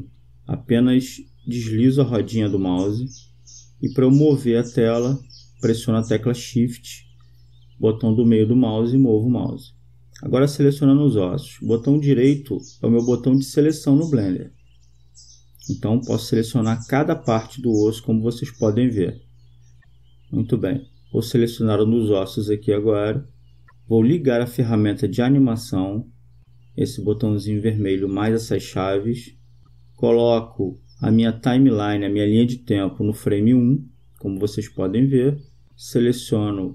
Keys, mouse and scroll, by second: 1.2-2.7 middle drag, 3.4-4.8 middle drag, 7.8-14.0 right drag, 20.2-21.9 right drag, 26.8-28.4 drag, 28.4 right click, 29.2-31.5 drag, 31.8-33.6 drag.